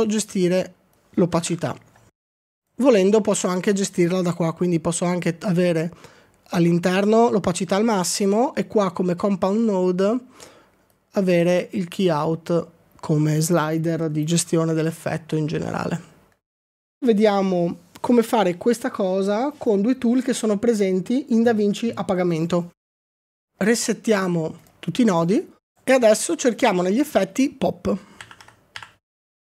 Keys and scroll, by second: 2.5 typing, 2.8 Return, 28.0-29.3 typing.